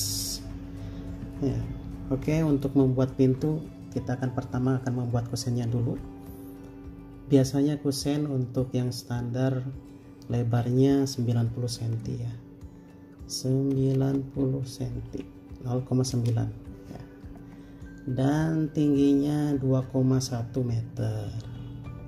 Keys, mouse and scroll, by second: 14.2-15.3 typing, 16.3 Return, 21.5-22.0 typing.